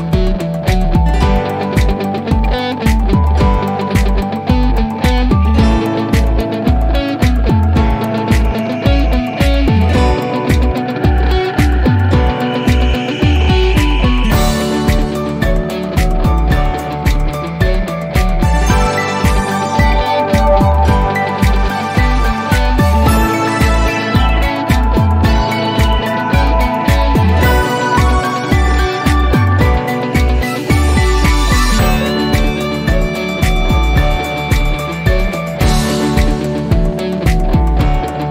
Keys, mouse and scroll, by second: 0.7 click, 0.7 click, 20.9-25.0 drag.